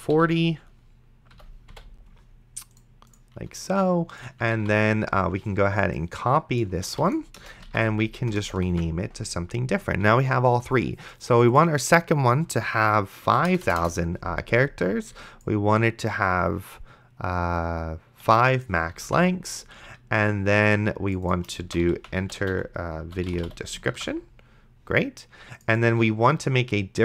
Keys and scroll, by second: 0.1 Delete, 1.3 End, 1.7 ,, 4.8 ctrl+s, 7.2 ctrl+c, 7.4 Return, 7.9 ctrl+v, 8.2 Return, 8.7 ctrl+v, 8.9 s, 13.5 KP_0, 18.5 5, 19.3 ctrl+s, 21.6-24.2 typing.